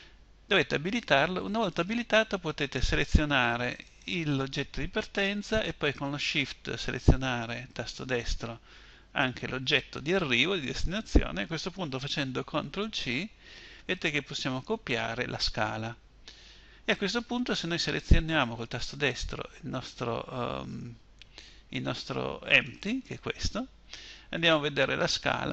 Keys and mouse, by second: 12.1 ctrl+c, 18.2-21.9 right drag, 22.1-24.4 right drag.